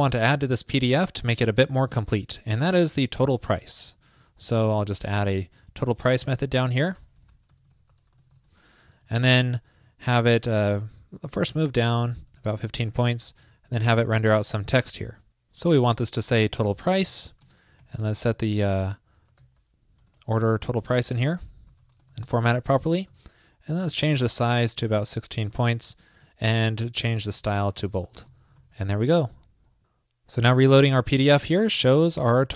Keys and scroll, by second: 5.8 super+Down, 6.7 super+Right, 13.2 super+Return, 22.7 super+Right, 29.0 super+s.